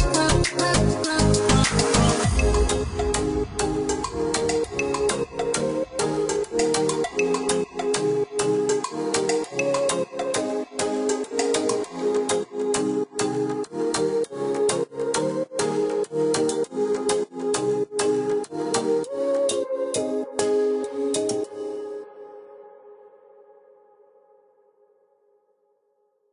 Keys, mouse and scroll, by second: 0.6-1.3 scroll up 1, 1.3-2.4 scroll down 1, 3.1 click, 4.5 click, 7.8 click, 8.7 click, 14.8 click, 17.1-18.4 scroll down 1, 18.4 click, 18.9-19.5 scroll up 1, 19.5-20.0 scroll down 1, 20.0 click, 23.9-24.3 scroll up 1, 24.6 Escape, 25.1-26.3 scroll up 1.